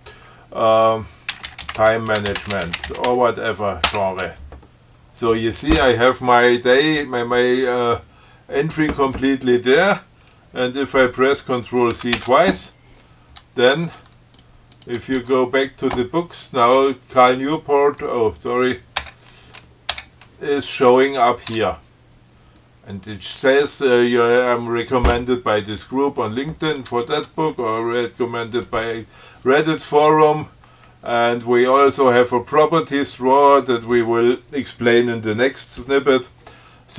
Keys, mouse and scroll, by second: 1.3-3.8 typing, 4.1 Return, 12.2 ctrl+c, 14.1 click, 14.3 Tab, 14.6 click, 15.0 click, 15.2 Tab, 18.6 click, 19.2 Return, 20.2 Return, 21.4 click, 21.7 Tab, 26.9 click, 27.4 Tab.